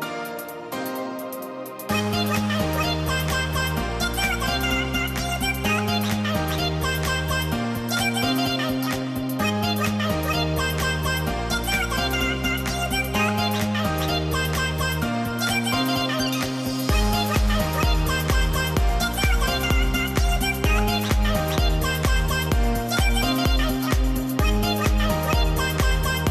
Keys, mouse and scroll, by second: 2.5-3.2 scroll down 1, 3.2-8.2 drag, 10.7 right click, 12.3-15.9 drag, 15.9 right click, 17.0 click, 21.5 click, 21.6-22.8 typing, 22.6 click, 23.5 click, 24.3 click, 25.3 shift+click.